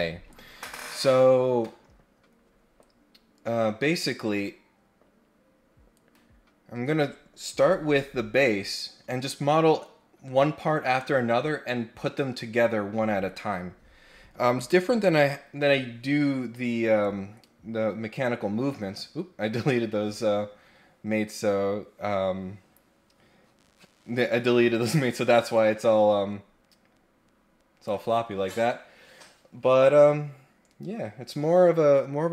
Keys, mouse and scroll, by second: 17.0-19.0 drag, 25.5-27.8 drag.